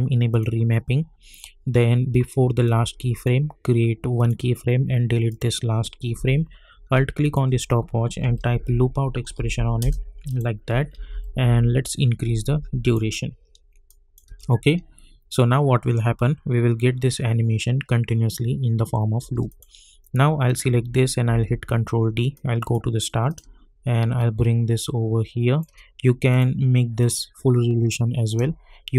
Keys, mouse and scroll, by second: 2.8-4.1 drag, 7.9-9.2 typing, 9.4 Down, 9.8 Return, 10.3 click, 10.9-11.5 typing, 12.4-13.9 drag, 14.2 space, 19.2 space, 19.4 click, 21.3 ctrl+d, 22.3-28.9 drag.